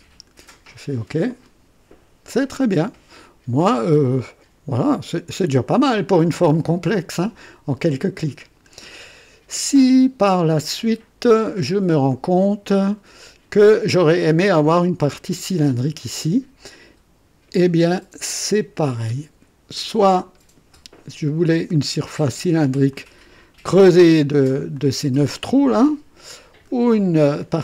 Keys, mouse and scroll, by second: 1.3 click, 2.4 click, 3.2-5.8 drag, 6.4-8.8 drag, 9.7 click, 11.3 right click, 12.1-13.5 drag, 21.6 click, 22.9 click, 24.7-26.8 drag.